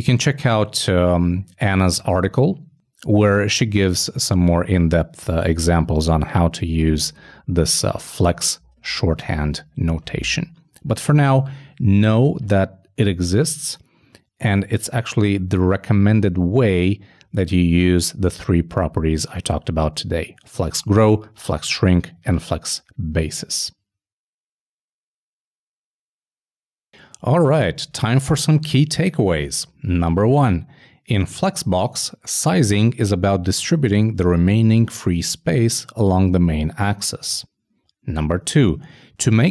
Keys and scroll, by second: 8.3 super+Down, 8.4 super+Left, 9.0 shift+super+Left, 9.1 shift+super+Down, 9.4 shift+BackSpace, 9.6 super+s.